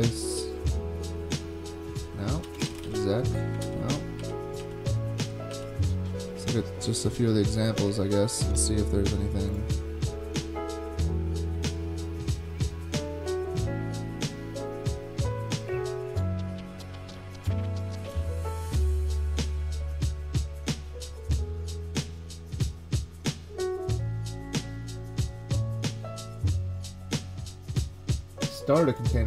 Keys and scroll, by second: 2.4-3.4 typing, 3.6 super+g, 4.2 super+g, 4.6 super+g.